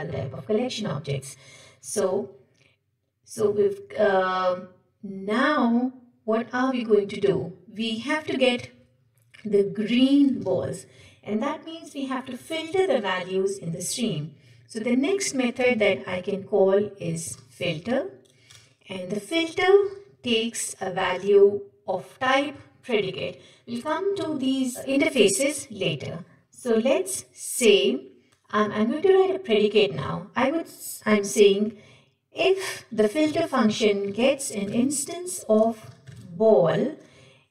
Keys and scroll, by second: 10.4 ctrl+shift+Left, 18.5 Return, 19.9 ctrl+p, 26.6 Escape.